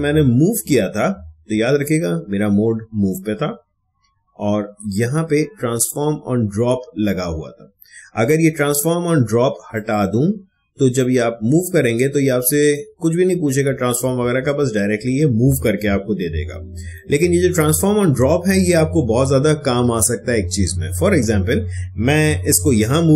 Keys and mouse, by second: 9.7-15.2 drag, 22.6 ctrl+z.